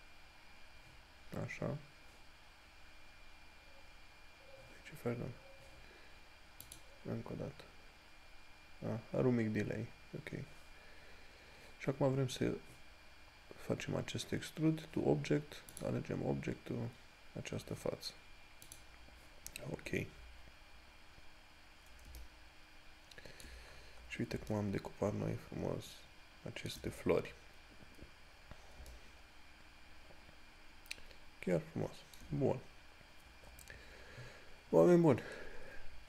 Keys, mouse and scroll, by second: 6.9 click, 16.0 click, 22.1 click, 22.4 shift+middle click, 23.9 scroll down 1, 29.2 shift+middle click, 35.2 scroll down 1.